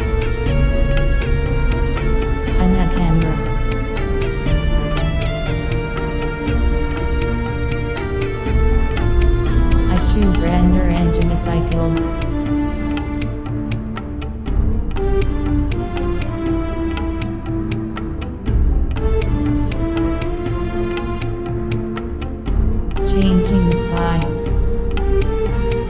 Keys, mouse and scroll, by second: 1.8 shift+a, 3.9 ctrl+alt+KP_0, 5.2 shift+f, 7.2 click, 8.8 F12, 8.8 Escape, 9.7 click, 12.5-14.8 right drag, 14.8 g, 16.8 click, 19.1-23.7 drag, 25.8 click.